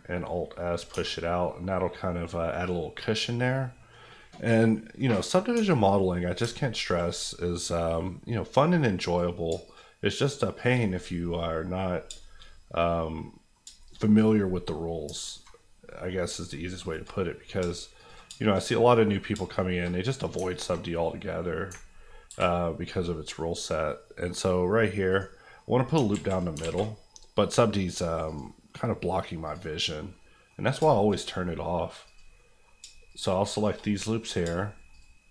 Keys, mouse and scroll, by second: 0.7 click, 0.9 Tab, 1.1 scroll down 1, 1.4-3.9 middle drag, 4.2 scroll down 1, 4.7 middle click, 5.4 scroll up 1, 5.6 Tab, 5.7 middle click, 6.0 scroll up 1, 6.8 alt+click, 7.2 KP_Decimal, 7.7-9.0 scroll down 1, 9.0 click, 9.4 shift+click, 10.5 shift+click, 10.9 KP_Decimal, 11.2 scroll up 1, 11.3 middle click, 11.7-12.7 scroll down 3, 12.4 shift+middle click, 12.7 middle click, 13.6 shift+middle click, 13.9 middle click, 14.0-15.0 scroll up 1, 15.0 alt+scroll up 1, 15.2 alt+click, 15.5 click, 15.7 scroll down 1, 15.8 middle click, 16.2 shift+middle click, 16.4 shift+click, 16.8 shift+click, 16.9 click, 17.2-18.0 scroll up 2, 18.0 shift+click, 18.3 shift+middle click, 18.6 middle click, 18.9-19.9 scroll up 2, 19.9-20.5 scroll up 2, 20.5 alt+click, 20.9 middle click, 21.7 ctrl+middle click, 22.3 ctrl+b, 24.0-25.1 scroll down 1, 25.1 right click, 25.5-26.6 scroll down 3, 26.1 alt+z, 26.6 alt+z, 27.9 click, 29.9 scroll up 1, 30.1 middle click, 30.5-30.8 scroll down 2, 30.9 shift+middle click, 31.1 middle click, 32.0 click, 32.3 middle click, 32.8 shift+middle click, 33.1 shift+click, 33.5 shift+click, 33.6 click, 34.0 middle click, 34.2-34.9 scroll up 2, 34.9 shift+click.